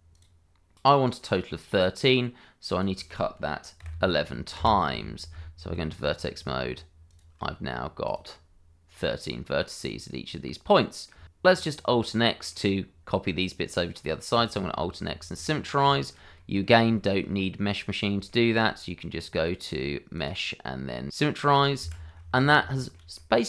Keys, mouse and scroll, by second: 0.1 click, 2.6 click, 3.8 1, 4.5 Return, 5.3 Tab, 6.0 click, 8.0 ctrl+click, 9.4-9.7 scroll down 1, 9.7 middle click, 10.6 shift+middle click, 10.8 middle click, 11.2 Escape, 12.0 middle click, 14.5 alt+x, 15.4 middle click, 15.9 shift+middle click, 16.3 middle click, 16.9 shift+middle click, 17.4 middle click, 18.2 shift+middle click, 19.8 click, 21.9 Escape, 22.1 middle click, 22.7 shift+middle click, 23.1 middle click.